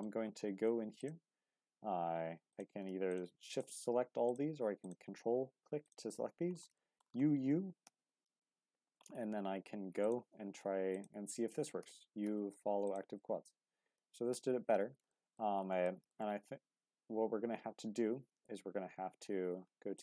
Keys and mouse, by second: 2.5 click, 3.5 shift+click, 4.3 click, 4.8 ctrl+click, 5.8 click, 6.8 shift+middle click, 7.8 u, 8.0 u, 10.0 click, 11.8 u, 13.7 Tab, 15.1 shift+middle click, 15.9 shift+middle drag, 17.6 Tab.